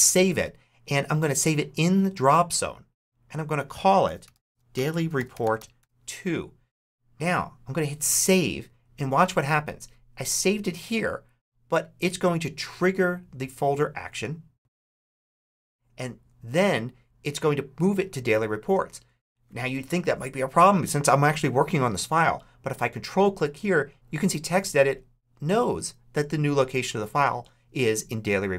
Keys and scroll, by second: 3.7-6.1 typing.